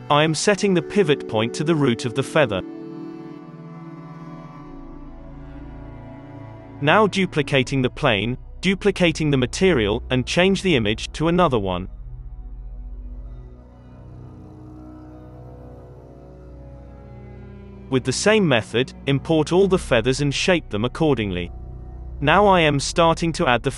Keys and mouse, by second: 0.2 ctrl+t, 0.8-2.5 drag, 1.6 g, 2.5 middle click, 3.3 shift+s, 3.7 Tab, 6.2 middle click, 6.3 g, 7.1 shift+a, 7.1 shift+d, 7.1 g, 8.4-11.9 drag, 12.0-13.3 drag, 13.1 n, 13.3 alt+a, 13.3 middle click, 14.2-18.2 middle drag, 18.2-20.3 drag, 19.8 alt+a, 20.3 ctrl+s, 20.4 z, 21.2 middle click, 22.1-23.7 drag, 22.2 KP_3, 23.1 alt+a.